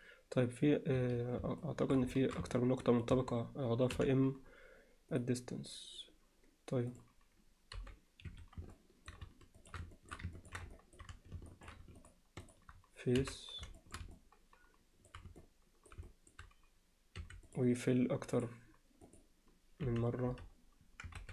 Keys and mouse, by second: 1.6 alt+middle click, 2.2 alt+shift+middle click, 2.5 alt+middle click, 3.2 a, 3.9 m, 7.8 g, 8.8 alt+middle click, 9.6 click, 10.0 middle click, 10.4 ctrl+alt+middle click, 10.8 alt+middle click, 11.5 alt+shift+middle click, 13.8 alt+shift+middle drag, 14.2-15.1 middle drag, 15.4 middle click, 16.1 alt+middle drag, 18.3 click, 19.1 click, 19.9 f, 20.3 f, 21.2 ctrl+z.